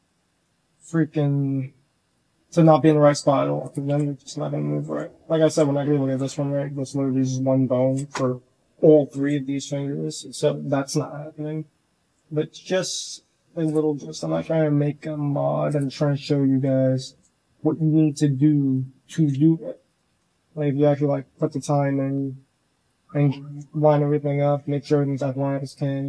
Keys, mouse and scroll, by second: 0.1 shift+drag, 0.1 shift+right drag, 0.6 r, 2.1 click, 2.1 right click, 2.8 click, 3.1 r, 3.5 click, 3.7 s, 4.7-5.3 drag, 5.3 s, 6.5 g, 11.4-12.0 drag, 12.2 s, 13.7-14.2 drag, 14.7 r, 15.9-16.5 drag, 16.9 drag, 17.4 drag, 17.4 right drag, 18.2 drag, 18.2 right drag, 18.7 click, 19.0-21.6 typing, 19.7 click, 20.1-20.5 drag, 23.0-23.4 drag, 24.2 drag, 25.5 click, 25.8 g.